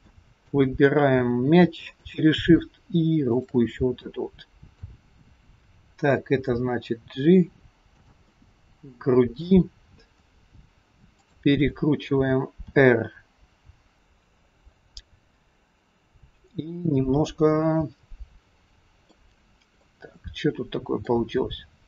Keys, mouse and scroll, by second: 0.1 middle click, 2.0 shift+click, 4.0 middle click, 5.5-5.9 scroll down 2, 6.4 g, 8.4 middle click, 11.2 shift+click, 12.7 r, 18.2-18.5 scroll down 2, 18.5 middle click, 19.8 middle click, 19.8-21.3 scroll up 1, 21.5 scroll up 1.